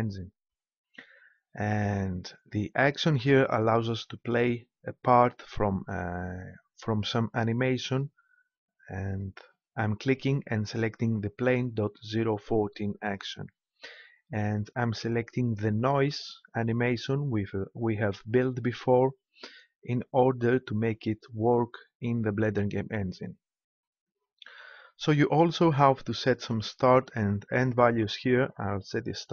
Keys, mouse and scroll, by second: 9.0-11.0 drag, 28.5-29.3 drag.